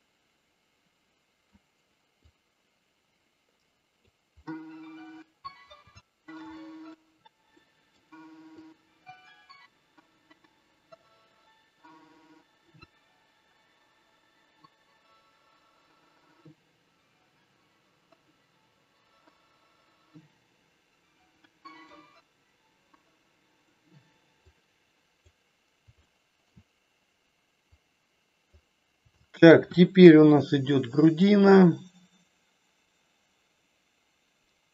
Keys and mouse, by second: 2.2-4.1 drag, 4.4 middle click, 5.9 shift+middle click, 6.6 middle click, 7.6 middle click, 8.6-12.7 drag, 12.8 middle click, 14.1-15.8 drag, 16.6-18.3 drag, 18.8 middle click, 19.9-21.3 drag, 21.4 middle click, 22.9 click, 24.4 click, 26.1 shift+middle click, 27.7 click, 29.2 shift+middle click, 29.9 KP_1, 31.2-34.7 drag.